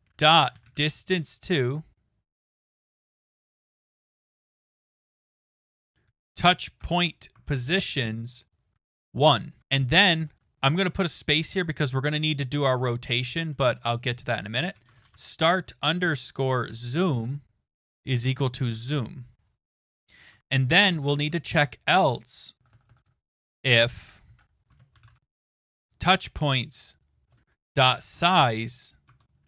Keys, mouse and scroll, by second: 0.0-3.9 typing, 6.8-7.8 typing, 9.0 typing, 9.2 Right, 9.5 Right, 9.6 Return, 10.2 Return, 12.4 click, 14.4-19.4 typing, 19.8 click, 20.0 click, 20.3 Tab, 20.7-26.1 typing, 27.5-28.9 typing, 29.1 Tab.